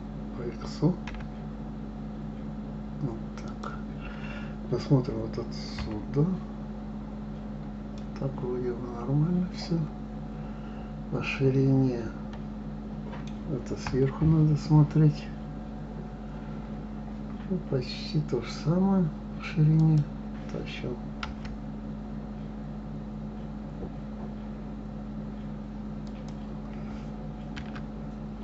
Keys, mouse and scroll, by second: 5.8 KP_3, 7.0-7.9 scroll up 2, 7.9-11.0 middle drag, 13.8 KP_7, 15.5 scroll up 1, 19.7 click, 21.2 g, 27.5 s.